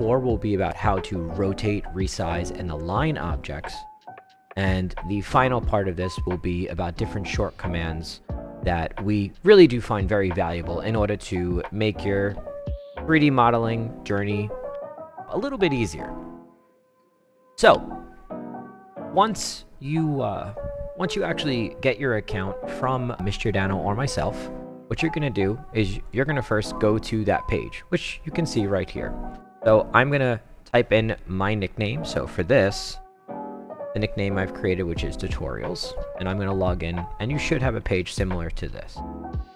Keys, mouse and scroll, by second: 26.0 click, 29.3 click, 30.1 click, 32.1-34.4 typing, 35.8 click.